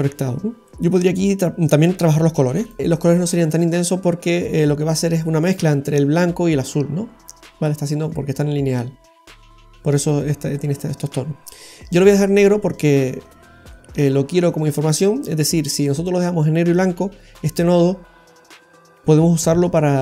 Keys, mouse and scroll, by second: 0.7 middle click, 11.8 click.